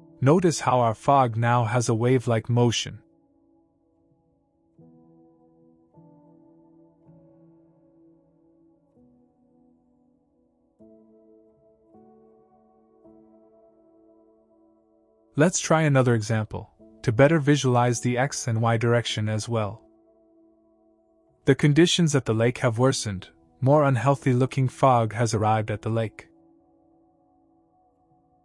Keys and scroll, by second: 16.3 typing, 18.2 Down, 18.2 2, 18.3 KP_0, 18.6 Return, 20.1 KP_3, 20.2 KP_0, 20.4 Return, 22.6 KP_1, 22.7 KP_5, 23.0 Return, 25.1 KP_1, 25.2 KP_5, 25.6 Return, 27.1 KP_2, 27.3 KP_0, 27.5 Return.